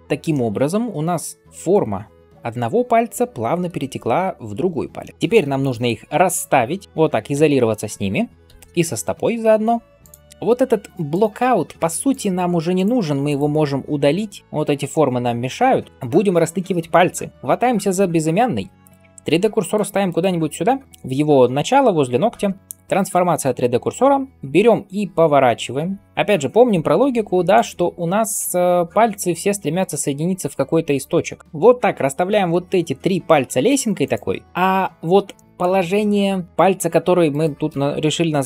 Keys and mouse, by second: 0.0 ctrl+space, 0.0-6.5 shift+middle drag, 6.5-9.9 drag, 7.2 KP_Divide, 8.3 KP_7, 9.9-12.6 middle drag, 11.8 x, 12.6 click, 12.7-14.6 middle drag, 12.9 x, 14.4 click, 14.4 x, 19.4 shift+right click, 24.3 r, 26.3-33.9 middle drag, 27.7 r, 28.6 g, 32.4 g, 33.9 click, 34.3 g, 37.1 shift+right click.